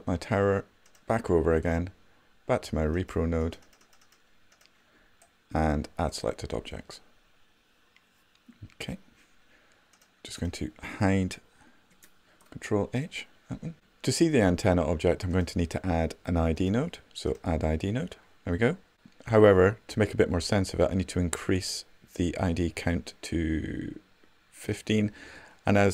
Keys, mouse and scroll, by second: 5.7 right click, 12.3 ctrl+h.